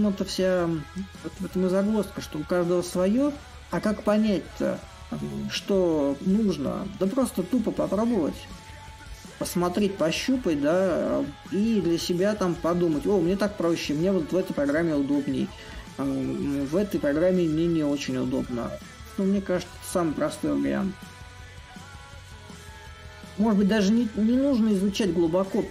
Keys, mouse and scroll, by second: 5.9-11.0 drag, 11.5-19.8 drag, 21.1-25.7 drag.